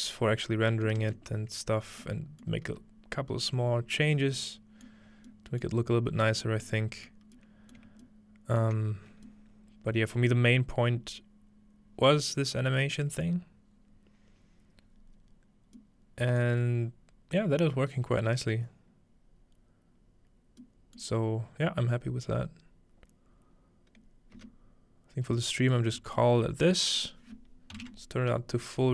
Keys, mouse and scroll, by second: 0.0 middle click, 0.4-1.5 scroll down 2, 2.5-4.2 middle drag, 2.8 z, 4.9 middle click, 5.6 middle click, 5.8-7.4 scroll up 1, 6.7 middle click, 7.8 shift+middle click, 8.6 shift+middle click, 9.5-11.3 scroll up 2, 10.3-12.3 middle drag, 11.3-12.3 scroll up 1, 13.6-16.5 scroll down 3, 15.8-20.6 middle drag, 21.0-24.3 middle drag, 24.3 space, 25.3-26.2 middle drag, 27.0 click.